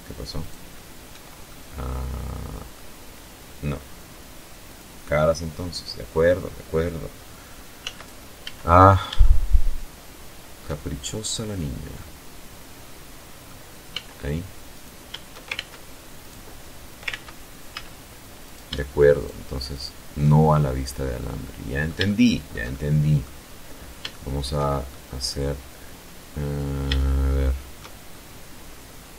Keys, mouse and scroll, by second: 3.0 click, 6.1 z, 7.1 scroll up 2, 7.5-9.0 shift+middle drag, 9.1 shift+scroll down 2, 10.2-11.9 middle drag, 12.1 z, 12.9 right click, 13.8 ctrl+shift+z, 14.5 right click, 15.4 ctrl+z, 16.7 shift+right click, 17.4 shift+right click, 17.9 shift+right click, 19.1-19.6 scroll down 4, 19.7 middle click, 20.4-21.6 shift+middle drag, 21.8-22.2 scroll up 2, 22.4 shift+middle click, 23.2 shift+middle click, 23.9 scroll down 2, 24.6 scroll up 2, 25.2-26.2 shift+middle drag, 26.4-26.7 shift+scroll up 3, 26.9 scroll down 2, 27.5 middle click, 28.4 shift+scroll down 2, 29.1 shift+middle click.